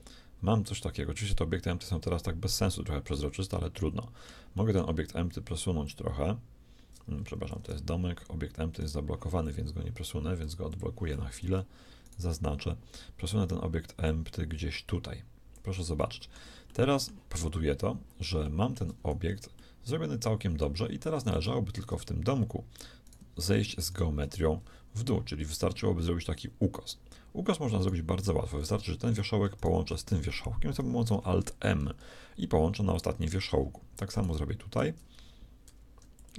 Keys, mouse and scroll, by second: 4.5-5.8 middle drag, 5.8-7.6 drag, 8.7-10.7 right drag, 10.4-12.7 drag, 12.0-14.0 right drag, 14.0-15.7 drag, 15.9-17.8 middle drag, 21.3 right click, 21.8 Tab, 23.3 right click, 25.4-27.4 right drag, 27.7-31.1 right drag, 31.1 alt+m, 35.7 alt+m.